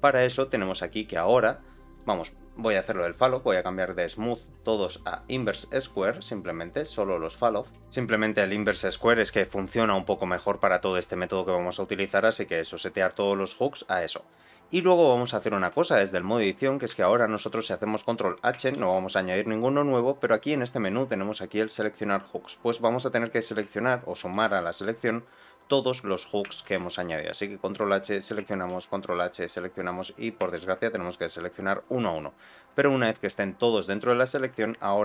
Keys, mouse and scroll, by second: 0.3 shift+middle click, 1.9 click, 2.9 click, 3.7-4.9 drag, 6.9 click, 7.1-7.7 scroll down 2, 7.9-9.1 drag, 14.0 click, 14.8 middle click, 15.6 Tab, 16.0 shift+middle click, 16.9 shift+middle click, 18.7 ctrl+h, 24.3 ctrl+h, 26.6 ctrl+h, 30.5 ctrl+h, 32.6-34.1 middle drag, 34.2 scroll up 2, 34.6 shift+middle click.